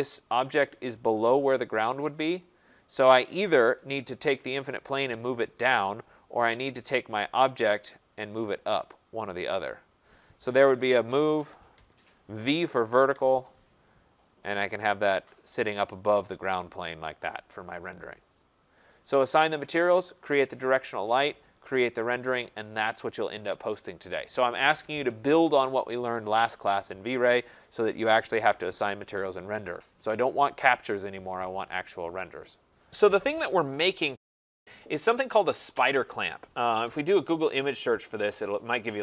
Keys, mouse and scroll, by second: 1.7-3.9 scroll, 4.0 click, 6.4 click, 7.7 click, 9.6 click, 10.4-13.2 typing, 14.2 click, 14.4-15.2 typing, 15.2 click, 16.2 click, 16.7-18.1 scroll, 20.2 middle click, 21.7 middle click, 23.1-26.9 middle drag, 34.6 click, 36.1 click, 38.1 typing.